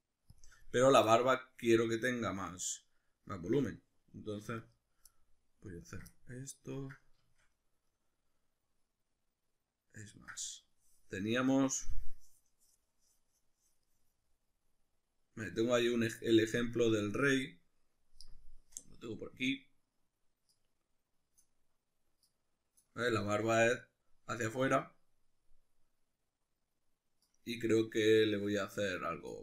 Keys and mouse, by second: 0.4 shift+click, 1.1-4.6 shift+middle drag, 4.4 3, 4.6 right click, 5.1-5.8 middle drag, 5.8 ctrl+right click, 6.1-20.8 middle drag, 21.0 middle click, 22.3-27.4 middle drag.